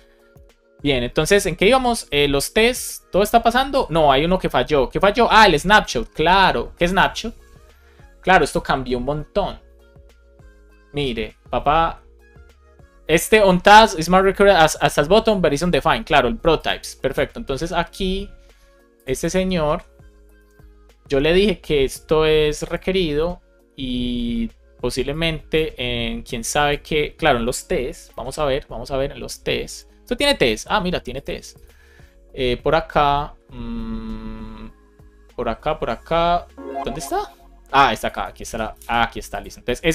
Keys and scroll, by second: 0.2 super+[, 1.1 super+Right, 20.3 super+c, 28.0 shift+super+e, 38.4 super+v, 38.6 super+s.